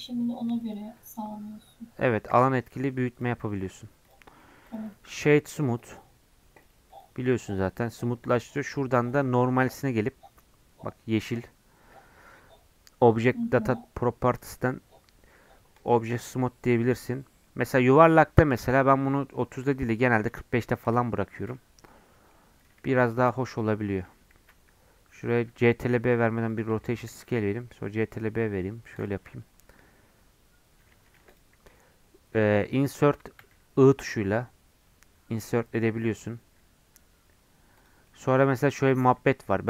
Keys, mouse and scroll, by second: 0.9-2.4 middle drag, 2.4 Tab, 2.7 middle click, 3.1 click, 3.4-4.4 right drag, 4.4 middle click, 4.6 click, 4.8 right click, 5.5-6.6 middle drag, 6.6-8.4 right drag, 8.4-16.3 drag, 16.3 middle click, 17.1 scroll up 2, 17.4-19.4 middle drag, 19.4-21.2 drag, 21.2-22.6 middle drag, 22.6 click, 22.8 Tab, 23.0 2, 23.6 alt+click, 24.4 ctrl+b, 25.5 Tab, 25.9 ctrl+a, 26.7 Tab, 27.1 ctrl+b, 29.1 Tab, 29.3-30.9 middle drag, 30.9 Tab, 31.2 3, 31.3 click, 31.7-33.4 middle drag, 33.4 i, 38.1 middle click, 39.0-39.6 drag.